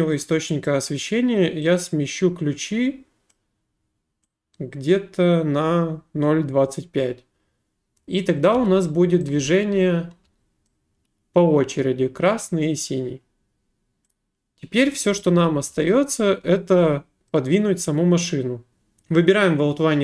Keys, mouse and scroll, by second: 0.6 click, 3.3 click, 8.5-10.7 typing, 10.7 right click, 14.9 click, 15.4-16.8 typing, 17.3 right click, 18.5-19.2 typing, 18.8 right click.